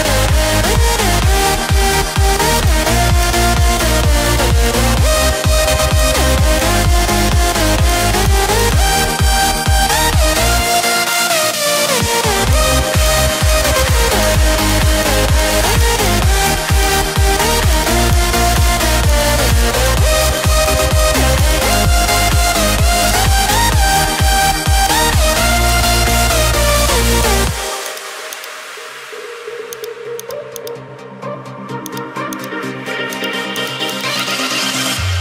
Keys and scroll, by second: 5.4 ], 5.6 ], 31.4 [, 31.6 [.